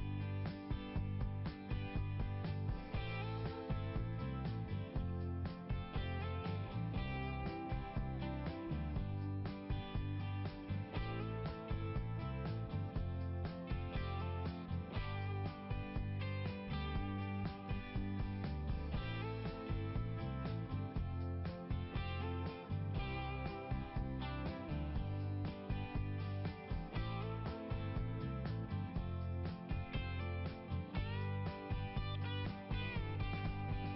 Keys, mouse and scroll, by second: 0.7 [, 1.8 click, 5.6 click, 5.7 click, 13.4 click, 13.5 click, 15.8 click, 16.0 click, 21.2 click, 23.8 click, 25.3 click, 26.1 click, 29.9 click, 33.9 click.